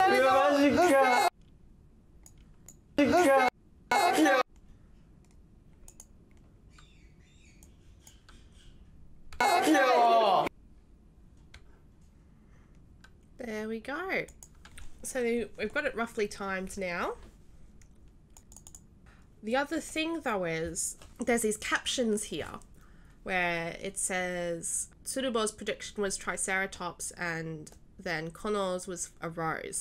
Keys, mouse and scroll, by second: 0.9 right click, 2.6 right click, 2.9 d, 3.9 w, 5.9 click, 7.6 right click, 8.1 right click, 9.3 s, 14.2 click, 18.3 click, 18.5 click.